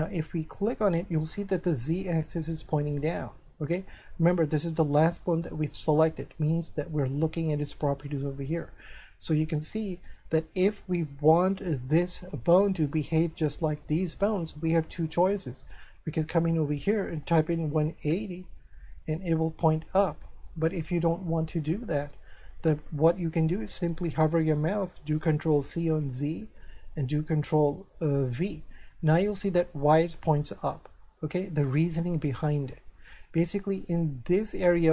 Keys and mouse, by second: 0.6 shift+right click, 10.2 shift+middle click, 16.1 click, 17.5 KP_1, 17.9 KP_0, 18.4 Return, 18.4 KP_Enter, 21.5 click, 22.6 KP_0, 22.8 Return, 22.8 KP_Enter, 26.0 ctrl+c, 28.4 ctrl+v, 31.1 shift+middle click.